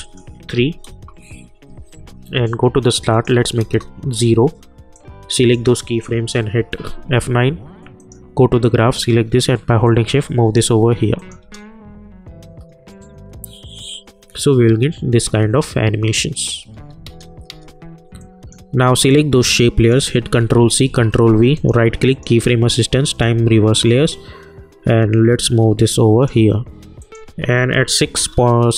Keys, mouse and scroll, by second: 12.8-13.9 typing.